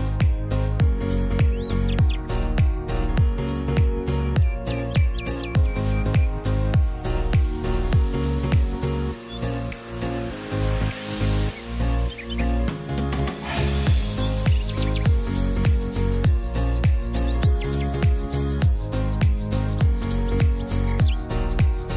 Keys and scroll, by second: 0.9-1.9 typing, 4.2-6.4 typing, 15.7 e, 17.6-18.4 typing.